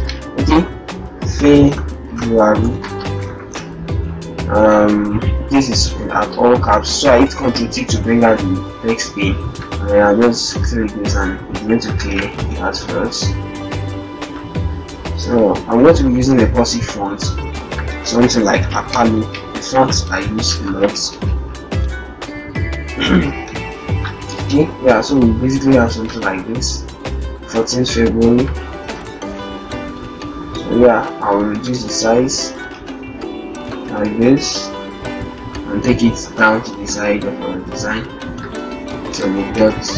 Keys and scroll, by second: 12.2 ctrl+Return, 15.7 ctrl+Return, 23.6 ctrl+Return, 28.7 ctrl+shift+t, 39.2 ctrl+shift+-, 39.3 0, 39.8 -.